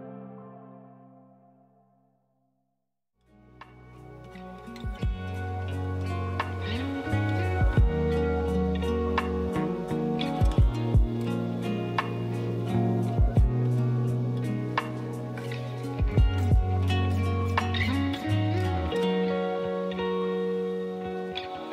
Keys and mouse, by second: 0.8 shift+a, 2.1-3.9 typing, 6.7 click, 11.2 drag, 16.0 r, 18.4 g, 18.4 z.